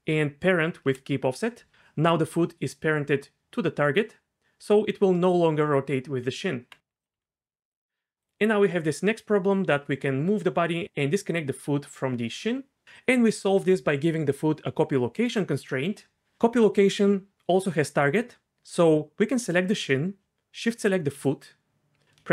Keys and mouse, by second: 6.3 Tab, 7.2 g, 7.7 click, 8.1 g, 8.7 g, 19.6 click, 21.1 shift+click.